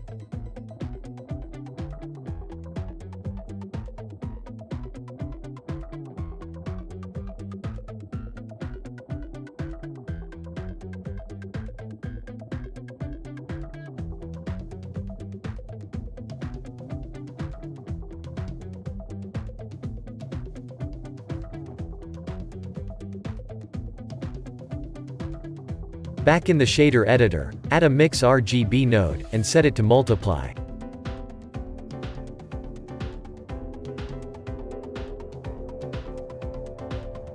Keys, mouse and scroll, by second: 4.0 g, 5.2 s, 6.5 g, 9.7 Tab, 9.9 click, 10.5-11.2 shift+middle drag, 11.2 scroll up 3, 11.9 click, 12.3 Tab, 13.8 a, 14.6 s, 18.4 g, 20.0 Tab, 20.3 click, 20.5 scroll up 1, 20.7-21.1 scroll down 5, 21.3-23.2 shift+middle drag, 23.2 scroll up 2, 24.8 click, 26.2-34.3 middle drag.